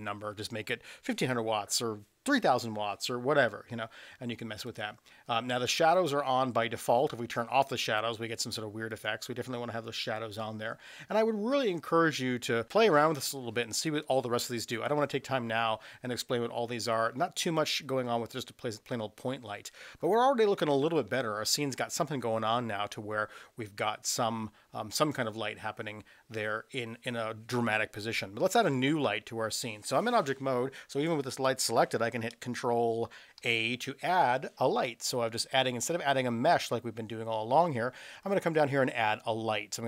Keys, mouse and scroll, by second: 5.9 click, 8.9 click, 33.4 shift+a.